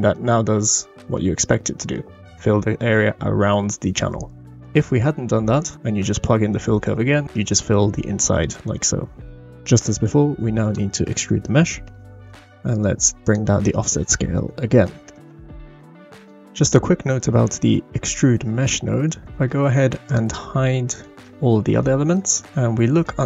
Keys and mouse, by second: 0.2-0.6 middle drag, 1.1-1.9 middle drag, 4.8 click, 5.5 drag, 7.1 middle click, 9.9 click, 9.9 middle click, 9.9 right click, 10.4 shift+a, 13.2-15.0 drag, 19.5 middle click, 20.9 shift+click, 21.2 h, 21.8-22.1 drag, 21.8-22.1 middle drag, 21.8-22.1 right drag, 22.5-23.1 middle drag, 22.5 h.